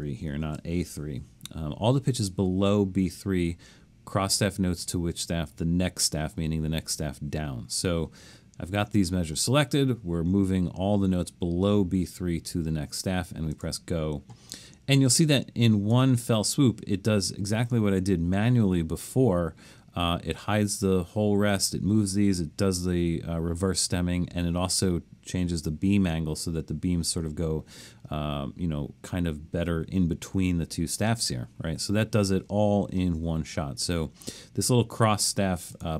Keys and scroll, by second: 0.4 shift+b.